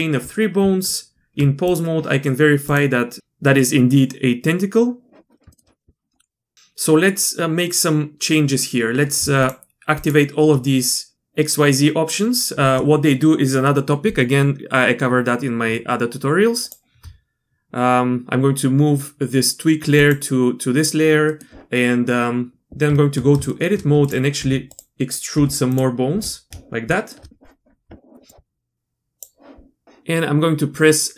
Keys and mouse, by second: 0.6 Tab, 2.7-4.6 drag, 5.5 shift+click, 16.6 shift+click, 20.0 click, 21.3 middle click, 22.8 Tab, 23.5 shift+click, 24.0 click, 24.4 r, 25.4 e, 26.1 e, 26.9 shift+click, 28.3 click.